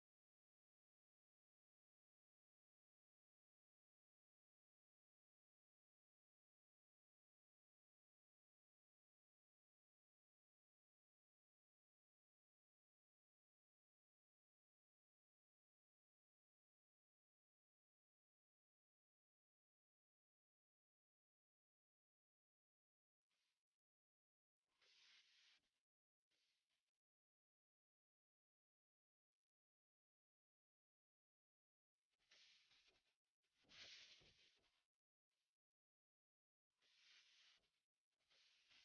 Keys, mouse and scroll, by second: 1.5 click, 2.3-3.9 typing, 5.2-8.1 typing, 8.3 Return, 9.1-11.2 drag, 10.6-12.1 typing, 12.5 Return, 13.3 click, 14.4 F10, 15.1 click, 16.0 right click, 16.5-19.2 drag, 22.4 Return, 23.5 click, 26.7 Return, 28.4-31.2 alt+drag, 29.8 Delete, 30.7-32.2 typing, 32.7 shift+Up, 32.8 shift+Up, 33.1 Return, 34.3-38.2 drag.